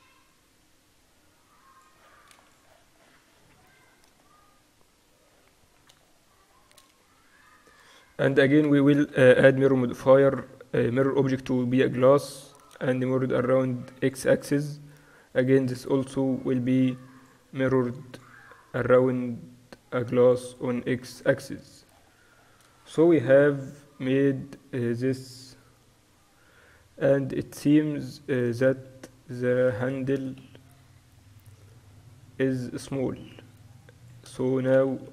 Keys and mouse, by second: 0.4-2.5 middle drag, 2.5 ctrl+s, 7.4 click, 7.5-9.7 right drag, 8.3-10.2 drag, 10.4-12.8 drag, 12.8 middle click, 14.1-15.3 drag, 16.3 right click, 17.2-23.2 drag, 23.2-24.4 middle drag, 23.5-24.3 KP_4, 24.6 KP_4, 25.5 KP_7, 28.1 KP_2, 29.2 KP_7, 30.9 s, 34.8-35.1 typing.